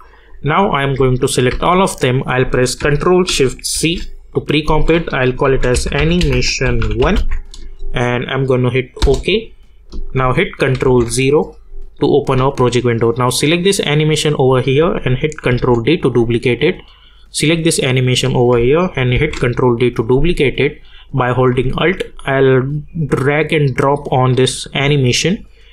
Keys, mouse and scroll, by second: 0.0 click, 1.5 ctrl+a, 3.7 ctrl+shift+c, 5.2-7.6 typing, 9.0 Return, 10.8 ctrl+0, 13.8 click, 15.5 ctrl+d, 17.2 click, 19.1 ctrl+d, 22.0 ctrl+d, 22.6-25.7 alt+drag.